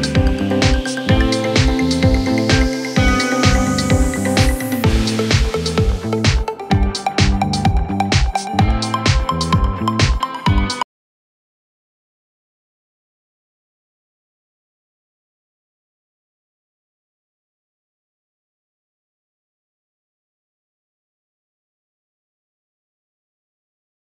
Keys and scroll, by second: 2.4 F3, 2.8 Escape, 9.9 shift+Page_Down.